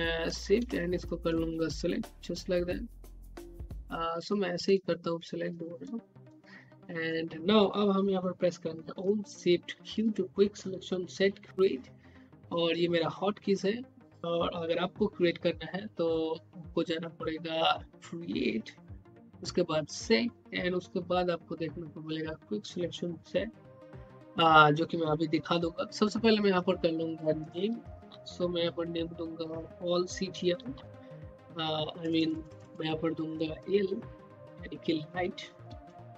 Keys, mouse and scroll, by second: 0.6 shift+Num_Lock, 0.8 shift+click, 2.7 z, 3.3 click, 3.6-4.0 scroll down 1, 4.1 click, 4.8 scroll up 1, 5.3 alt+middle click, 5.7 ctrl+click, 6.7 alt+middle click, 9.3 alt+middle click, 9.8 alt+shift+q, 11.9-14.2 drag, 26.3 click, 30.2-30.5 typing, 32.5-33.2 typing, 35.7 Caps_Lock, 36.1 l.